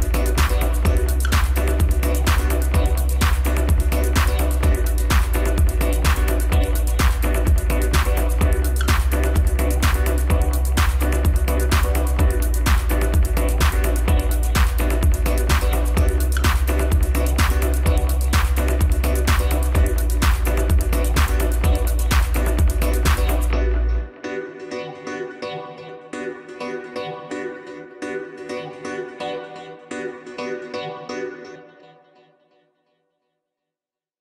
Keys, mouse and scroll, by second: 0.3 click, 0.7-1.0 scroll up 1, 1.0 scroll down 2, 1.3-3.5 middle drag, 3.5 KP_1, 4.8-7.9 drag, 9.3-12.3 drag, 12.5-14.1 scroll up 1, 14.1 KP_Divide, 14.7-15.4 scroll down 2, 15.4 s, 19.4-19.9 scroll up 2, 19.9 Tab, 20.4 scroll up 1, 20.6 scroll down 3, 20.8 middle click, 21.4 scroll up 1, 22.7 click, 23.4-24.8 middle drag, 24.8-25.2 scroll up 1, 25.2 scroll down 3, 25.5 middle click, 26.3 click, 27.0 KP_1, 27.6-28.3 scroll down 2, 28.3 s, 30.9 middle click, 31.6 scroll up 1, 32.2 click, 32.9 KP_1, 33.8 s.